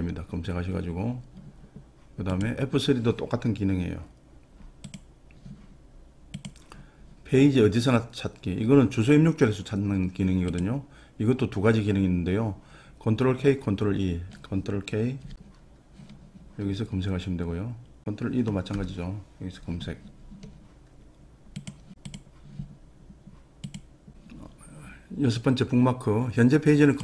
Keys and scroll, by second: 9.0 ctrl+e, 18.8 ctrl+e.